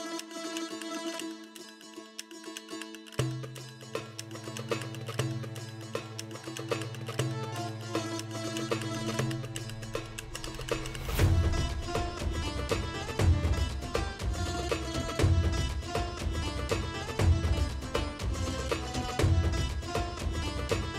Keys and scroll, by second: 0.7 space, 3.3 space, 5.3 ], 7.0 [, 7.7 ], 10.7 s, 11.0 [, 17.3 F9, 17.9 [, 19.0 o.